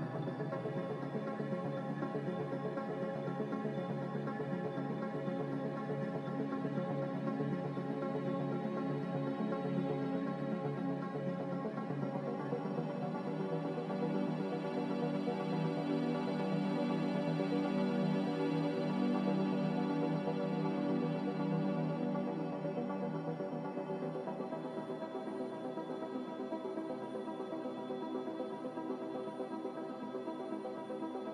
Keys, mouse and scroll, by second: 4.6-5.4 typing, 10.0 g, 20.8 Escape, 23.2-24.0 typing, 25.4 typing, 26.8-27.5 typing.